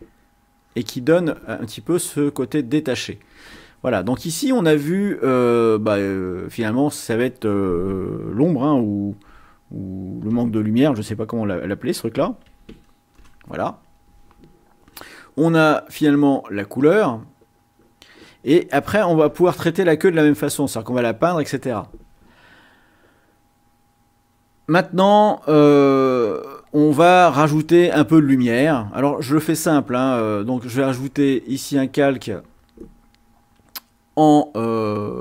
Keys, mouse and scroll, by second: 0.5 click, 2.2 click, 3.1 click, 6.1 click, 9.3 o, 10.2 m, 12.0-13.1 typing, 13.2 Return, 16.0 click, 30.9 click.